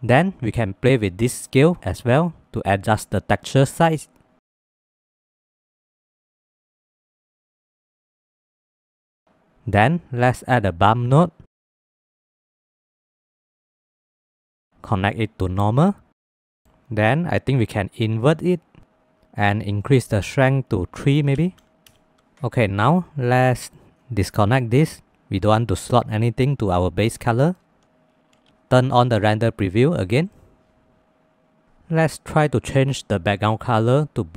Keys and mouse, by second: 0.8-2.7 drag, 5.2 middle click, 6.4 middle click, 6.8 middle click, 7.4 click, 8.7 middle click, 9.2 middle click, 9.6 click, 10.1-13.5 drag, 14.4 middle click, 14.8-15.9 drag, 16.7 middle click, 19.9-21.9 drag, 23.0 middle click, 23.5 middle click, 30.5 drag, 32.5 click, 33.3 click.